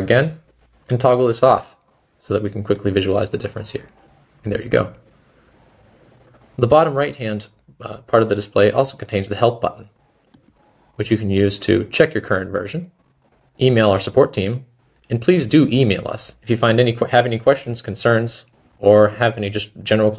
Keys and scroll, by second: 0.0-0.4 typing, 5.9 typing.